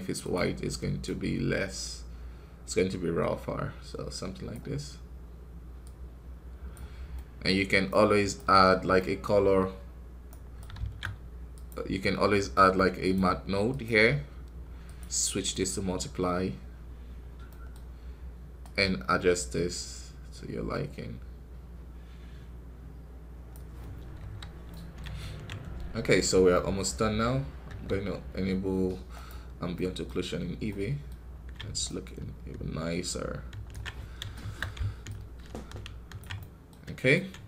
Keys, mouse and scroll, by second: 0.9 click, 5.8-7.8 drag, 7.8 right click, 8.5 scroll down 1, 8.8 middle click, 9.2-10.2 scroll up 2, 10.2-13.6 right drag, 13.6 shift+a, 15.2-17.1 drag, 17.1 scroll down 1, 17.4-18.6 middle drag, 18.6-21.5 drag, 23.7 scroll down 1, 24.1 KP_1, 24.6-29.1 middle drag, 29.1 q, 29.6 middle click, 30.0 scroll up 3, 30.6 middle click, 31.0-31.7 scroll up 1, 31.7-33.8 ctrl+alt+drag, 33.8 scroll down 1, 34.2 shift+middle click, 34.9-36.2 ctrl+alt+drag, 36.2-37.4 middle drag.